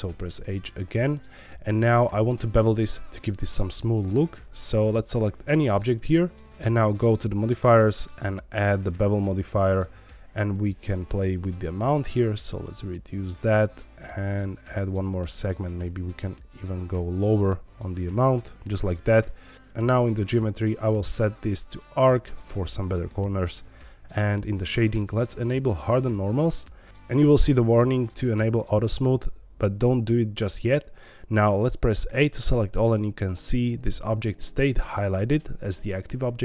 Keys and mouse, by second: 0.4 h, 2.7 shift+middle click, 3.4 shift+middle click, 5.7 click, 6.3 shift+middle click, 6.9 click, 8.0-9.1 drag, 11.3-13.2 shift+drag, 14.2 click, 15.4-18.5 shift+drag, 19.5 click, 20.9-22.2 drag, 23.4 click, 24.1 click, 25.9 click, 32.0 a.